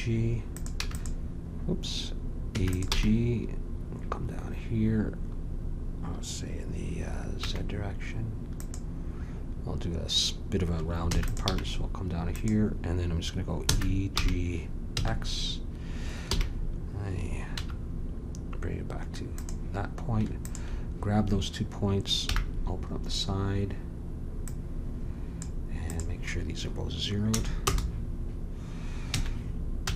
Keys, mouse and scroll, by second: 0.8 w, 2.5 e, 2.9 g, 11.0 e, 11.4 g, 13.6 e, 20.4-22.2 drag, 22.2 n, 24.4-28.9 drag, 29.0 a, 29.8 n.